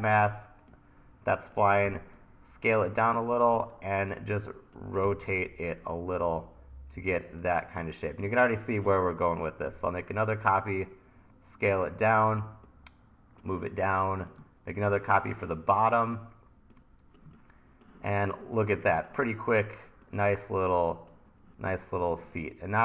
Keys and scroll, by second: 1.9 t, 3.5 e, 4.8-5.8 typing, 9.7 t, 11.9 e, 15.9 e.